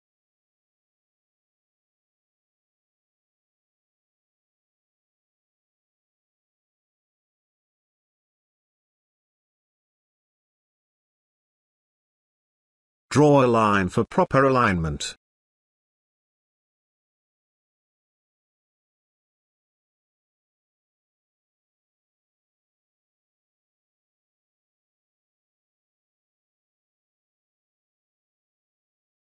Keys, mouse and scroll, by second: 3.5 BackSpace, 3.9 Right, 4.6 click, 4.9 space, 5.1-5.7 ctrl+click, 7.4 space, 7.7-8.3 ctrl+click, 8.6-9.8 ctrl+drag, 9.9-10.6 ctrl+drag, 14.8 click, 17.2-19.7 drag, 25.3 space, 25.4 ctrl+click, 26.5-27.1 ctrl+drag.